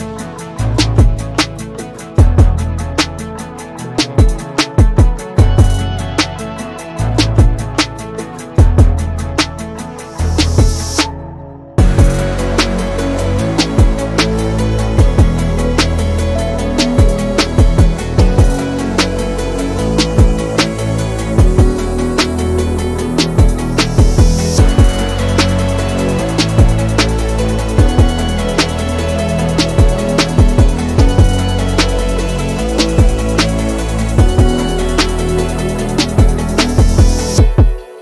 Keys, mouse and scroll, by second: 0.1-1.0 middle drag, 1.0 scroll down 1, 1.2-1.8 middle drag, 1.8-2.1 scroll up 1, 2.1 middle click, 2.3 scroll up 1, 2.6 KP_3, 3.6 r, 6.3-7.7 middle drag, 7.7 click, 8.0 scroll down 2, 8.4-9.0 middle drag, 9.0 scroll up 2, 9.5 middle click, 9.7 scroll up 2, 10.2 click, 10.6 drag, 12.1 click, 12.5 click, 13.6 shift+drag, 14.0 shift+click, 14.5 shift+click, 14.8 shift+drag, 15.3 shift+click, 16.6 KP_7, 17.8 shift+d, 19.0-20.4 middle drag, 20.4 click, 22.0 click, 22.9 scroll down 3, 23.1-25.5 middle drag, 25.5 r, 27.0 scroll down 1, 27.1-27.5 middle drag, 27.5 scroll up 1, 27.8-28.5 middle drag, 28.5 r, 29.6-30.7 middle drag, 30.7 KP_7, 31.1-32.2 scroll up 2, 32.2 r, 34.9 click, 35.6-36.5 middle drag, 36.5 click, 37.1-37.5 middle drag, 37.5 scroll up 1, 37.9-38.0 middle drag.